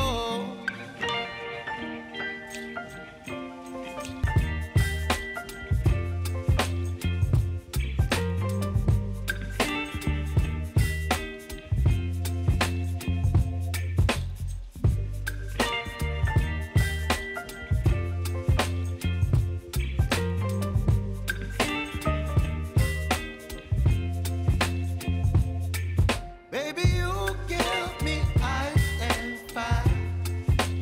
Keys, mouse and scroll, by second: 0.3-2.9 drag, 2.9 space, 4.8 click, 7.1 r, 7.7 click, 8.3 u, 9.4-25.5 drag, 25.5 k, 26.7 click, 27.4 ctrl+c, 27.7 ctrl+v, 29.0 click, 29.2 space.